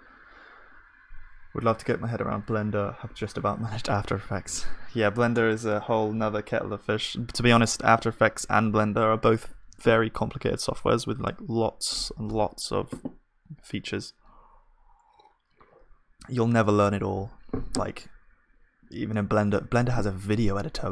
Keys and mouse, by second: 5.4 Tab, 5.7 Tab, 7.2-11.9 middle drag, 19.2 ctrl+s.